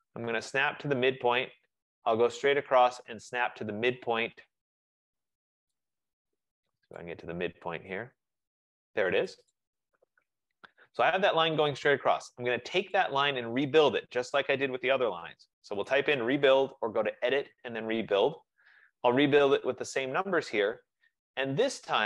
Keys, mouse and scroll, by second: 1.5 click, 6.9 F15, 7.1 right click, 9.7 click, 10.6 Return, 13.1 click, 15.9-17.4 typing, 20.5 click, 21.5 typing.